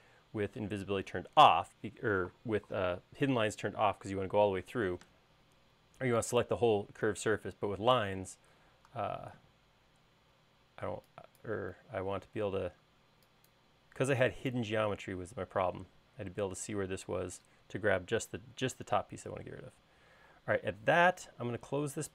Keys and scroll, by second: 9.0 e.